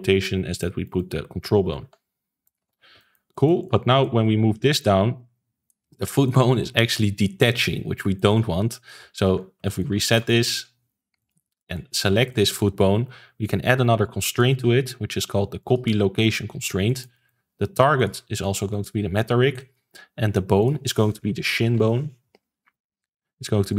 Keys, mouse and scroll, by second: 1.6 alt+r, 1.8 alt+g, 2.4 click, 2.6 ctrl+s, 2.9-3.6 shift+middle drag, 3.6 click, 3.8-4.8 middle drag, 4.8 click, 5.8-9.2 shift+middle drag, 9.2 alt+g, 9.6-10.0 shift+middle drag, 10.0 ctrl+s, 10.2-11.1 shift+middle drag, 11.1 click, 11.5-14.2 shift+middle drag, 14.2-16.3 drag, 16.3-16.8 scroll down 3, 16.8-17.9 shift+middle drag, 17.9-19.5 drag, 19.5-20.5 shift+middle drag, 20.5-23.7 drag.